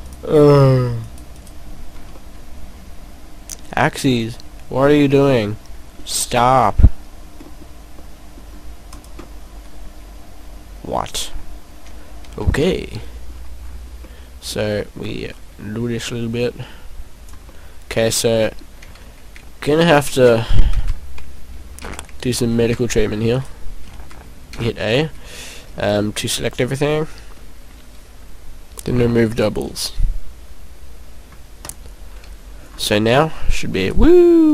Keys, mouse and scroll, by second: 1.0 shift+right click, 1.3 shift+right click, 2.1 shift+right click, 2.1 middle click, 4.4 scroll down 2, 4.7 middle click, 6.6 e, 9.1 click, 9.2 middle click, 12.4 ctrl+z, 13.3-13.8 scroll up 4, 13.9-14.6 scroll down 3, 14.1 middle click, 15.0 middle click, 16.0 click, 17.5 middle click, 19.0 ctrl+a, 20.1 ctrl+z, 20.9 ctrl+z, 21.8 ctrl+a, 22.6 ctrl+a, 23.4 right click, 24.0 ctrl+a, 24.6 a, 25.8 a, 26.5-27.2 scroll down 3, 30.8 scroll down 1, 32.3 click, 32.6 scroll up 2, 33.2 right click.